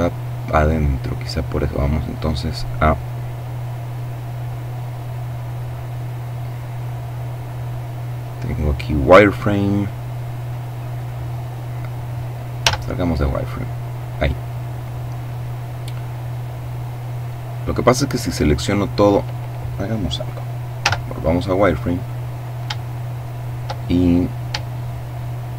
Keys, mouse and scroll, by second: 2.1-8.5 middle drag, 9.4 click, 11.5 z, 19.6 z, 20.8-22.0 middle drag, 22.2 shift+middle click, 23.6 shift+middle click, 24.6 middle click.